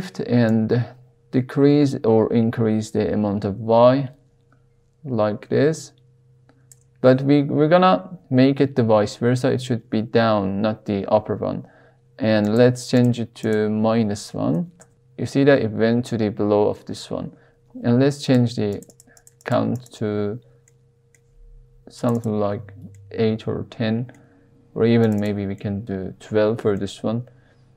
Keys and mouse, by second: 0.6-6.7 shift+drag, 12.4-14.9 drag, 18.2 click, 18.6 click, 19.2 click, 19.4 click, 19.8 click, 20.6 middle click, 22.0 click, 22.2 click, 22.9-24.1 middle drag, 25.0 click, 25.1 click, 25.6 shift+middle click, 26.7-27.7 middle drag.